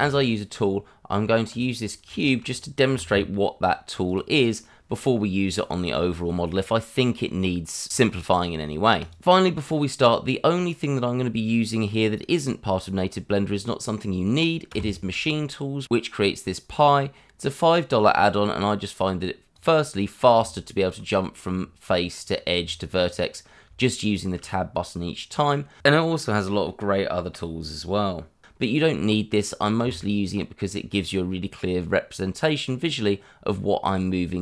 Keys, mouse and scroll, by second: 1.5 click, 1.8 scroll down 1, 2.1 shift+middle click, 2.9 g, 3.1 y, 4.0 click, 5.5 scroll up 1, 9.0 click, 9.4 middle click, 14.7 Tab, 19.5 click, 20.3 Tab, 23.8 shift+middle click, 29.8 Tab.